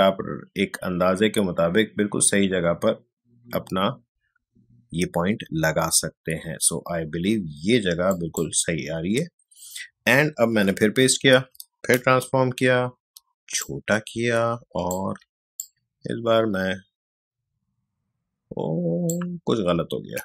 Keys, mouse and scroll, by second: 8.1 click, 10.5 ctrl+v, 13.6-20.2 alt+shift+drag.